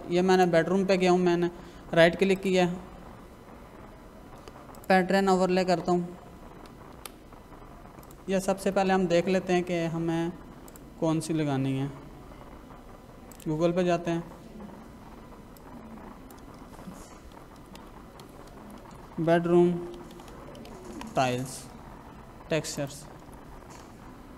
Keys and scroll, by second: 6.9 Escape, 17.3-20.7 typing, 20.9 Return, 23.1 space.